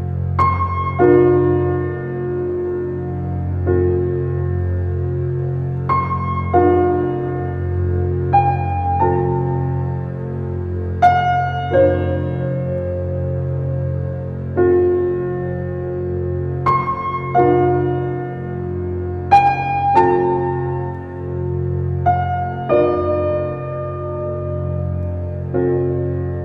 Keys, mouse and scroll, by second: 0.9-1.6 middle drag, 1.6-2.0 scroll up 3, 2.1-2.5 shift+middle drag, 3.2 g, 4.5-6.5 middle drag, 7.8 Tab, 8.2 middle click, 9.4 ctrl+r, 10.9 s, 14.8 ctrl+r, 17.3 s, 21.4-25.1 middle drag, 25.1 Tab, 26.1 shift+a.